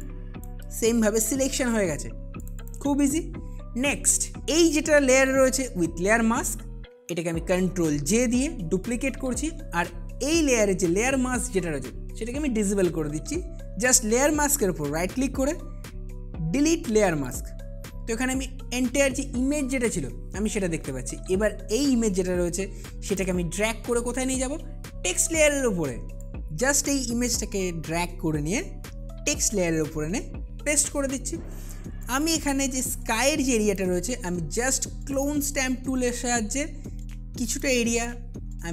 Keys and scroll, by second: 33.3 space.